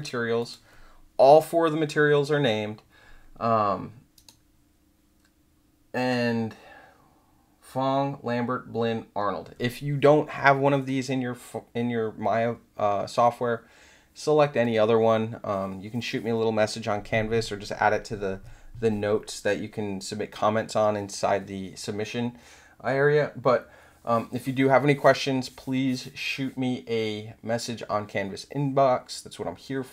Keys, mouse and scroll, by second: 0.3 click, 4.2 right click.